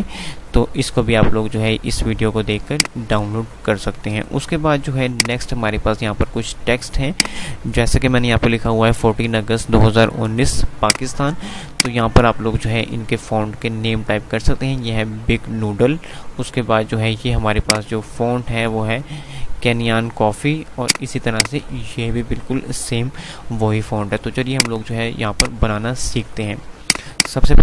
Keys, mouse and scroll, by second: 10.8 click, 13.9 F5, 17.4 click, 20.8 click, 23.7 F3, 24.6 click, 24.8 F2, 25.6 click, 25.8 F2, 26.9 click.